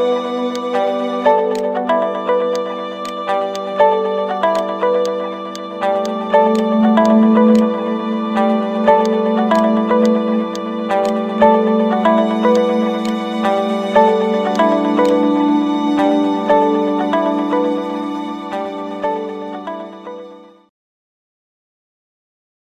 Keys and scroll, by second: 10.4 space, 11.4 Return, 15.8-17.6 typing.